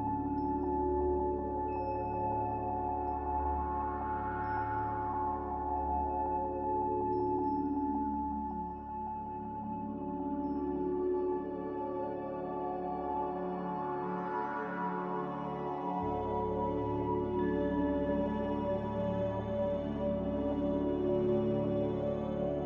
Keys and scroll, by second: 1.1 1, 13.3-14.2 typing, 20.9-21.9 typing.